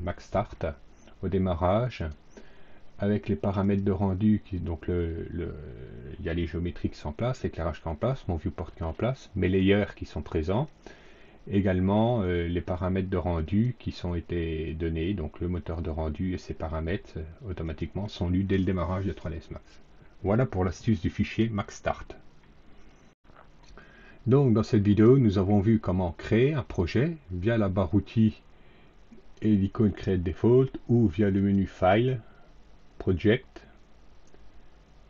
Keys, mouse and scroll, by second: 1.9 click, 3.5 click, 17.6 click, 23.0 click, 31.3 click.